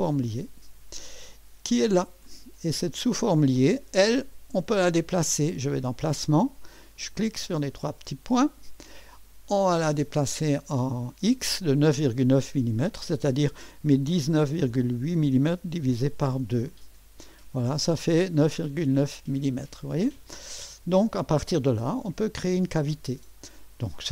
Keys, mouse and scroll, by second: 0.0 click, 2.3 click, 7.0 click, 7.7 click, 9.7 click, 13.9-15.9 typing, 16.8 Return, 21.1-24.1 scroll up 1.